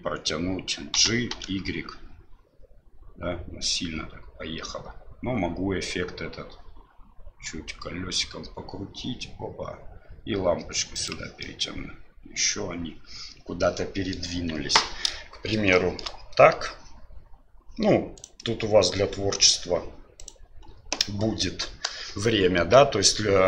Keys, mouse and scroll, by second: 0.9 g, 11.4-14.2 middle drag, 14.3 KP_1, 15.8 middle drag, 18.2-20.3 right drag.